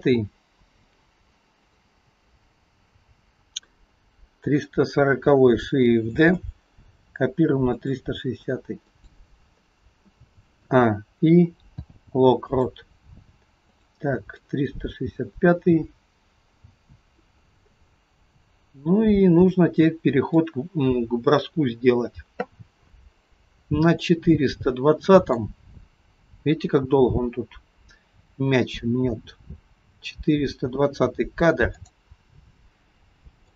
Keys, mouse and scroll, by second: 1.7 click, 3.2 click, 6.3 shift+d, 8.9 click, 10.7 a, 11.8 i, 13.8 click, 14.5 click, 17.8 middle click, 24.1 middle click, 31.8 click.